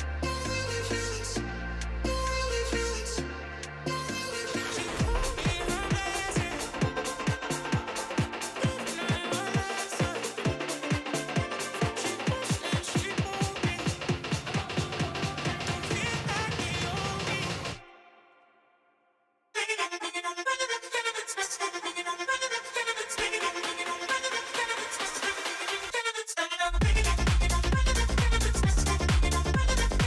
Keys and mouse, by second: 18.9 n, 19.6 ctrl+s, 19.7 ctrl+s, 20.4 click, 20.9 s, 21.8 s, 21.9 s, 21.9 s, 23.2 s, 24.1 g, 26.0 g, 27.9 g.